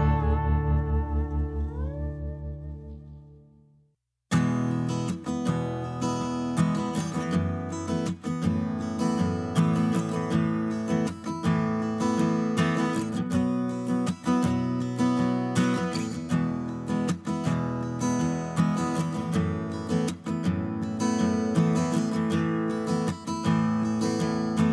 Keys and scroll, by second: 2.1 ctrl+z, 2.4 s, 3.4 space, 4.8 b, 10.0 Page_Down, 11.6 space, 12.5 b, 18.1 Page_Down, 18.9-19.7 typing, 20.9 space.